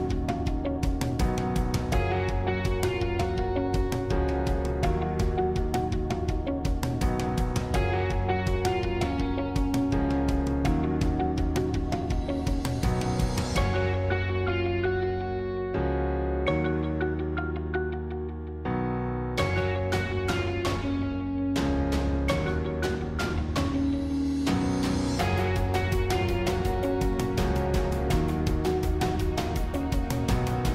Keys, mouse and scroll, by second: 2.5 shift+click, 3.4-6.3 middle drag, 8.9 shift+click, 11.1 shift+click, 12.5 shift+click, 15.6 shift+click, 16.1-20.9 shift+middle drag, 20.9 shift+click, 21.5-24.1 middle drag, 24.1-24.9 scroll down 1, 24.9-27.5 scroll down 1, 27.5 click, 29.0 ctrl+z.